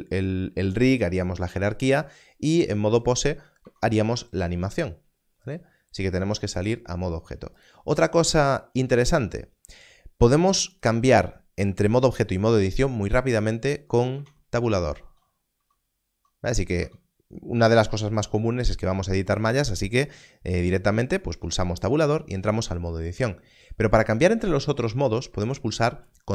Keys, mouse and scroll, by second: 3.5 click, 3.8 Tab, 4.2 x, 6.5 click, 8.2 x, 10.7 click, 14.1 click, 14.2 Tab, 14.9 Tab, 15.5 Tab, 16.0 Tab, 16.4 Tab, 16.7 Tab, 21.2 Tab, 21.3 Tab, 22.9 Tab, 25.2 Tab.